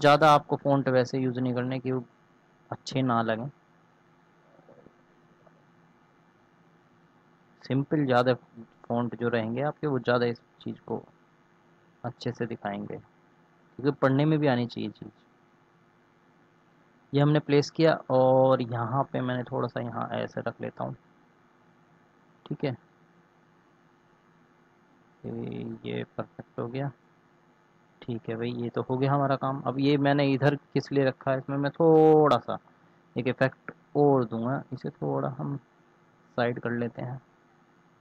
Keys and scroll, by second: 32.1 ctrl+s.